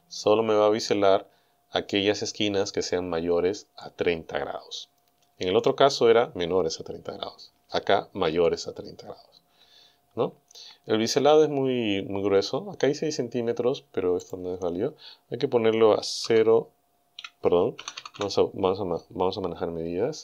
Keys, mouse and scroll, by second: 14.3 click, 16.3 KP_0, 17.2 KP_Decimal.